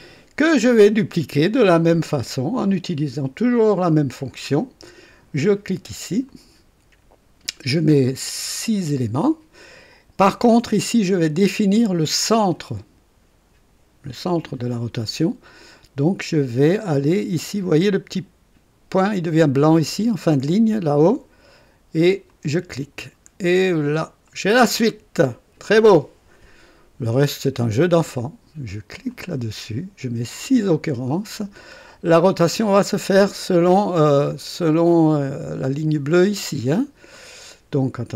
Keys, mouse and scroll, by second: 6.2 click, 8.6 scroll up 1, 22.2 click, 23.4-23.8 scroll down 1, 24.2 right click, 29.0 click, 30.5 scroll up 1, 34.1-35.1 drag, 37.1 click.